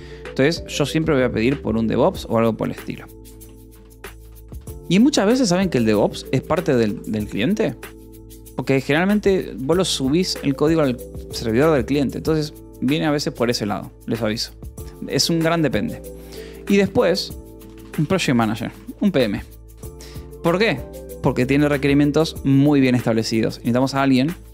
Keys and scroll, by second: 1.3 shift+u, 1.3 space, 1.8 /, 4.0-6.6 typing, 7.3 ctrl+s, 8.8 o, 9.2 :, 9.4 space, 15.2-18.4 typing, 19.2 ctrl+s, 19.5 j, 20.3 j, 21.2 ctrl+s, 23.2 ctrl+s, 23.6-24.5 typing.